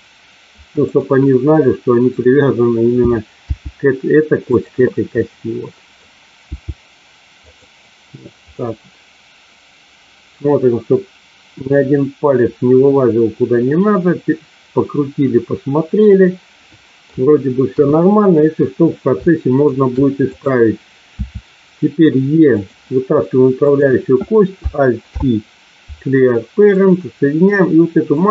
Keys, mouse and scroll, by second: 3.4 g, 4.5 click, 5.1 middle click, 7.4 click, 8.5-17.0 middle drag, 17.6 KP_1, 19.3 shift+middle click, 20.1 click, 21.1 e, 22.4 click, 25.0 alt+p, 28.1 click.